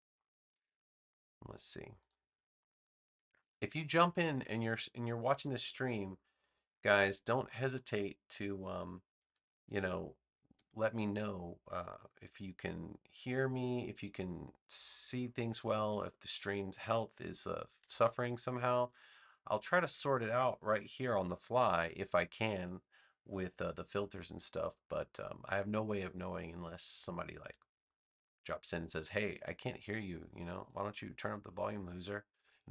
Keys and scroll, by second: 3.3 space.